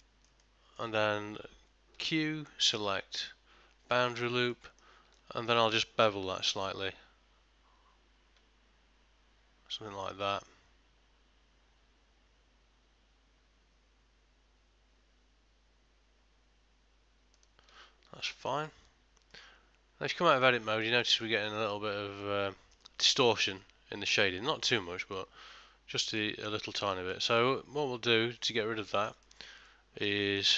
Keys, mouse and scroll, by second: 0.1 shift+middle click, 0.5 middle click, 2.0 q, 4.6 middle click, 5.3 ctrl+middle click, 6.6 ctrl+b, 18.3 ctrl+middle click, 18.8 Tab, 19.4 middle click, 20.7 ctrl+middle click, 21.1 shift+middle click, 21.5 middle click, 26.2 ctrl+middle click, 27.0 shift+middle click, 27.4 middle click, 28.9 middle click, 29.0 shift+middle click, 29.3 shift+middle click, 29.7 middle click, 30.3 ctrl+middle click.